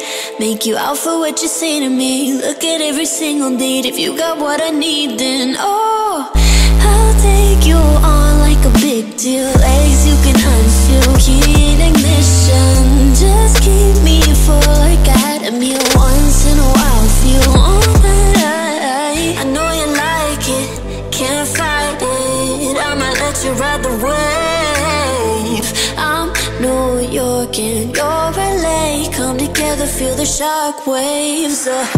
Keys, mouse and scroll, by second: 3.5 click, 5.4 click, 6.2 click, 7.8 click, 8.4-9.5 typing, 16.4-17.5 typing, 20.8 click, 21.6 click, 22.4 click, 25.1 click, 25.3-26.2 typing, 31.2 click.